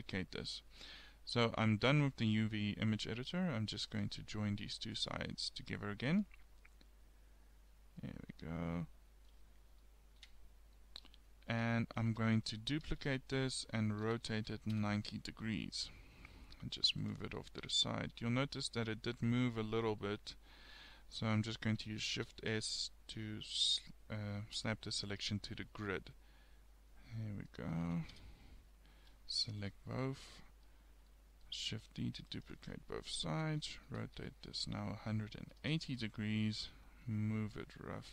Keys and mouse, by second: 3.9-6.2 middle drag, 8.0 click, 8.5 click, 9.5 middle click, 10.3 Tab, 11.5 KP_7, 12.9 shift+d, 14.1 r, 15.4 g, 16.8 click, 18.2 g, 19.5 click, 21.3 KP_7, 22.2 shift+s, 27.5 middle click, 27.9 a, 28.2 a, 29.6 KP_7, 32.0 shift+d, 33.4 r, 36.6 g.